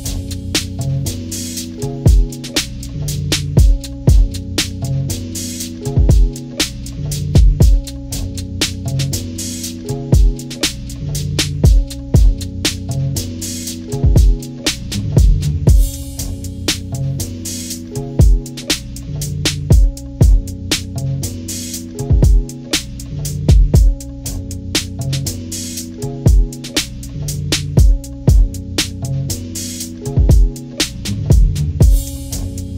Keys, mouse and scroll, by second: 0.1 click, 0.9 click, 1.0 click, 1.3 ctrl+-, 1.7 click, 1.9 ctrl+=, 2.2 ctrl+=, 2.5 click, 3.0 ctrl+-, 3.4 ctrl+=, 3.4 ctrl+scroll up 1, 3.6 scroll down 2, 3.8 click, 4.4 ctrl+-, 4.7 ctrl+=, 4.9 scroll down 2, 5.2 click, 6.0 ctrl+scroll up 2, 6.3 click, 7.2 click, 7.6 ctrl+-, 7.8 ctrl+=, 7.9 click, 8.3 9, 8.7 ctrl+=, 8.7 ctrl+scroll down 2, 8.8 ctrl+=, 9.0 ctrl+scroll up 2, 9.2 click, 9.4 scroll down 1, 9.6 click, 10.2 click, 10.7 click, 10.9 click, 11.8 scroll up 1, 12.1 click, 12.5 click, 12.7 ctrl+-, 13.1 ctrl+=, 13.1 ctrl+scroll down 1, 13.3 click, 13.8-14.7 scroll down 5, 14.4 click, 14.6 ctrl+-, 16.8-17.9 drag, 18.1-19.7 drag, 19.7 ctrl+-, 20.1 click, 20.3 ctrl+=, 20.6 scroll up 2, 21.3 click, 22.5-23.5 drag, 24.2 click, 24.4 scroll down 2, 24.6 ctrl+=, 25.1 click, 25.7 click, 26.1 click, 27.2 click, 27.7 click, 28.1 ctrl+-, 28.5 ctrl+=, 29.1 ctrl+=, 29.3 scroll down 2, 29.5 click, 30.6 ctrl+-, 31.6-32.0 scroll up 2, 32.0 ctrl+=, 32.0 ctrl+scroll down 2, 32.2 scroll up 2, 32.6 click.